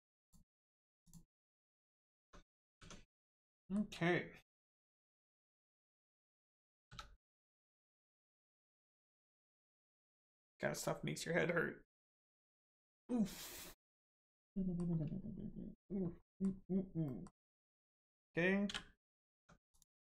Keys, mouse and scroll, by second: 1.0 click, 2.1 Tab, 3.5 shift+middle click, 4.4 click, 5.3 middle click, 6.8 3, 7.5 click, 8.1 middle click, 14.4 middle click, 16.2 middle click, 17.4-18.6 scroll down 1, 19.3 Tab, 19.7 click.